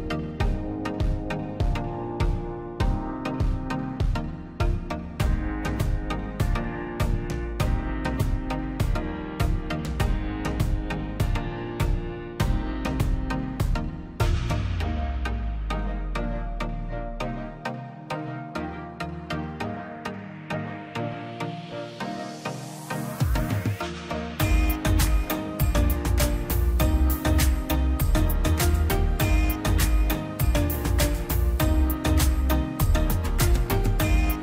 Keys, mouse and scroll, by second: 1.2 click, 1.4-1.8 scroll up 1, 1.8 click, 3.0 scroll down 1, 4.5 click, 4.7 scroll down 1, 5.5 click, 7.2 scroll down 1, 8.1 click, 10.7 click, 13.0 scroll up 1, 13.4 click, 15.8 click, 16.6-16.9 scroll down 1, 16.9 middle click, 17.4 scroll up 1, 18.8 click, 20.6 ctrl+z, 21.9 click, 24.6 click, 25.5-26.0 scroll up 1, 26.0 click, 29.9 click, 31.3 scroll down 1, 32.4 scroll down 1, 33.5-34.0 scroll down 1, 34.0 middle click, 34.1 scroll down 1.